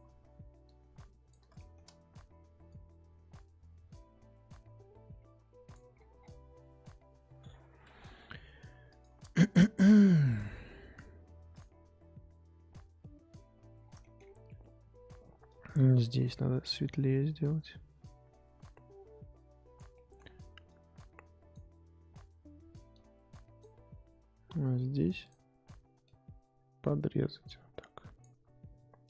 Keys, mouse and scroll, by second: 1.5-2.7 shift+middle drag, 2.7-5.9 drag, 5.9-7.2 scroll down 7, 7.2-8.4 scroll up 8, 9.0 click, 9.5 shift+middle click, 9.8-11.5 scroll up 2, 11.5 click, 13.8 scroll down 3, 14.0 shift+middle click, 14.2-15.4 scroll up 3, 15.4-19.9 drag, 19.9 shift+middle click, 20.6-25.2 drag, 26.0-29.0 drag.